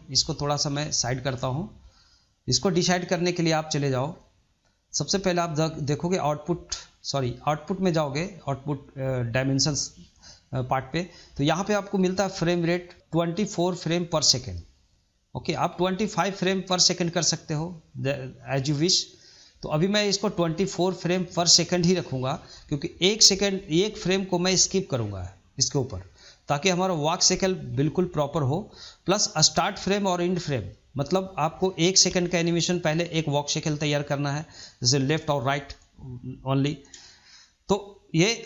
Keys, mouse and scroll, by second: 1.7-4.7 middle drag, 5.7-10.2 drag, 14.1-21.7 drag, 24.2-27.3 drag, 30.2-33.3 drag.